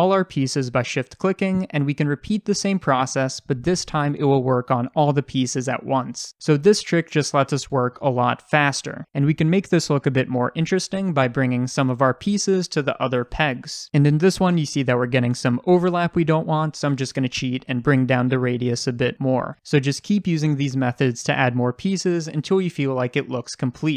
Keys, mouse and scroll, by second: 0.6 shift+click, 1.8 shift+d, 3.7 s, 6.7 click, 7.8-9.3 shift+middle drag, 9.3 drag, 9.4 shift+drag, 9.9 g, 10.8 click, 11.1 g, 11.8 click, 11.9 shift+middle click, 12.3 g, 12.8 click, 13.0 g, 13.8 click, 14.0 scroll up 1, 14.2-16.7 shift+middle drag, 17.3 click, 18.0 s, 19.6 click, 19.7 scroll down 2, 19.8 shift+middle click, 20.2 click, 20.3 scroll up 1, 20.4 click, 20.5 shift+middle click, 20.7-23.1 typing, 21.0 click, 21.8 click, 22.3 click, 22.3 shift+middle click, 22.8 click, 22.9 shift+middle click, 23.7-23.9 scroll down 4, 23.7 click, 23.8-23.9 middle drag.